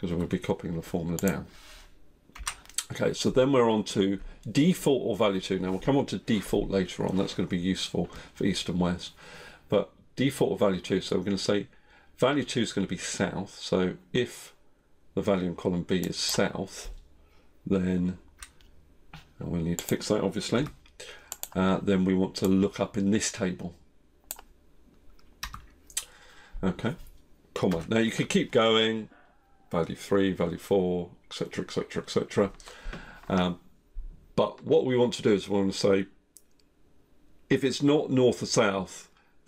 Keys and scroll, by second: 20.5 F4, 25.4 F4.